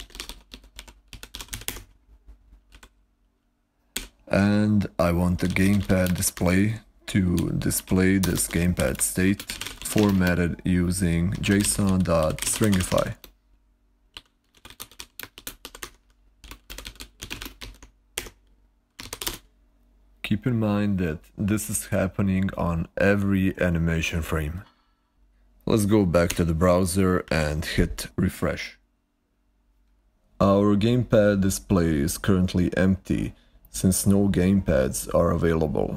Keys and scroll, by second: 0.0-2.6 typing, 3.9 o, 5.0-12.8 typing, 14.0-19.5 typing, 18.0 Escape, 26.7 ctrl+Left, 27.2 super+r.